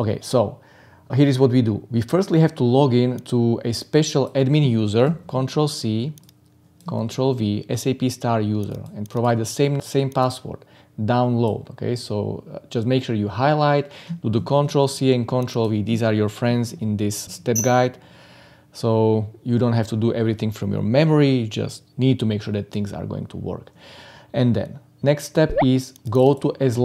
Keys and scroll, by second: 5.0 ctrl+c, 6.9 ctrl+v, 14.3 ctrl+c, 16.4 ctrl+v.